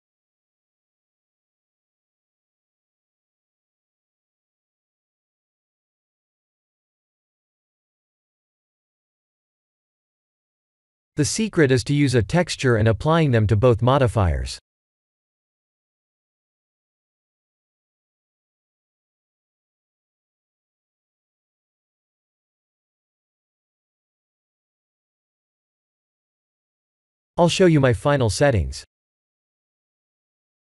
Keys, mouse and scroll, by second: 2.7 click, 9.2-10.2 scroll down 5, 10.2 click, 13.7 click, 15.4 click, 17.5 click, 22.3 click, 23.3-24.6 scroll down 13, 24.6 click.